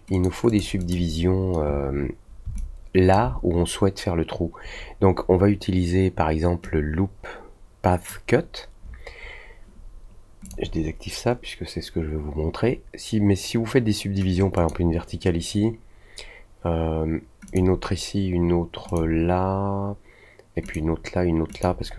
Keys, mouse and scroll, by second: 0.1 click, 0.4 click, 0.7 click, 2.5-3.1 alt+drag, 6.6-8.0 drag, 10.4 click, 14.5 click, 17.4 click, 18.8 click, 20.6 click, 21.5 click.